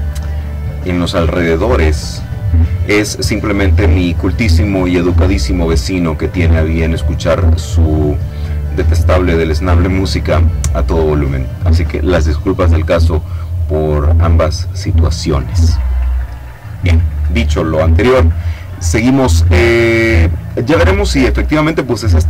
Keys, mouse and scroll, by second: 20.2-22.2 middle drag.